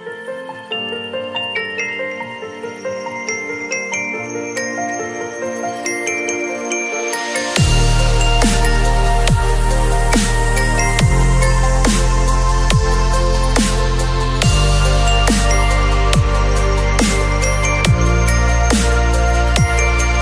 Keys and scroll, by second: 0.2 ctrl+t, 10.5 ctrl+], 12.3 ctrl+t.